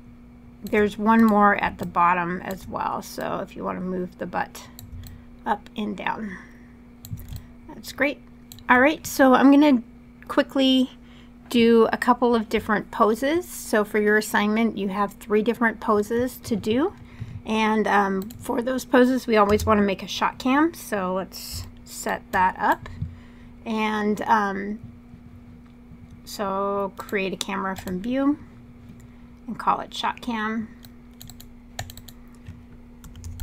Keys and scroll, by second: 19.2 space, 32.5-33.4 typing.